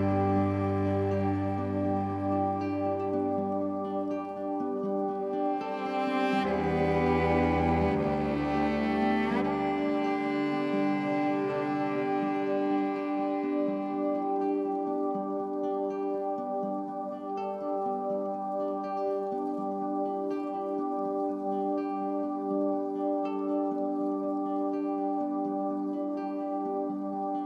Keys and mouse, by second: 1.0 click, 2.2 click, 3.1 alt+shift+click, 4.2-7.4 drag, 7.8-9.1 drag, 9.4 alt+click, 10.9-12.6 drag, 12.8 alt+click, 13.5-14.8 drag, 15.0 click, 17.6 click, 19.0 n, 21.4 click, 21.4 typing, 23.0 typing, 24.6-24.9 typing.